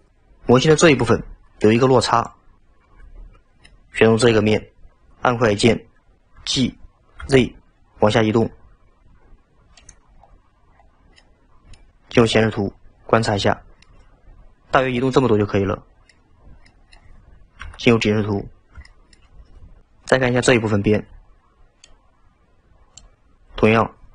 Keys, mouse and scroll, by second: 3.3-3.7 scroll down 2, 3.7-6.2 middle drag, 6.4 g, 10.2-10.9 scroll up 3, 10.9-11.2 scroll down 1, 11.2 middle click, 12.1 KP_1, 13.2-13.6 scroll up 1, 13.6-16.4 shift+middle drag, 16.4-16.7 scroll down 3, 16.7-17.6 middle drag, 17.6 KP_7, 18.6 scroll down 1, 18.9-19.8 shift+middle drag.